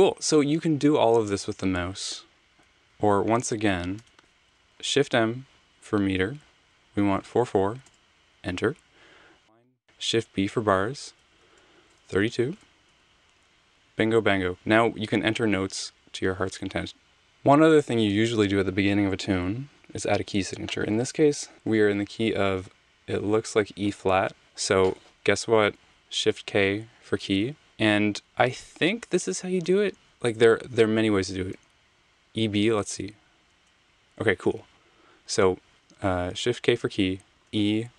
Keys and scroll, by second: 2.6 super+z, 2.9 super+z, 4.0 BackSpace, 4.7 m, 6.8-7.8 typing, 9.8 b, 12.2-13.0 typing, 25.7 k, 29.3 e, 31.5 b, 33.5 Return, 35.6 super+z, 36.3 k, 37.3 e.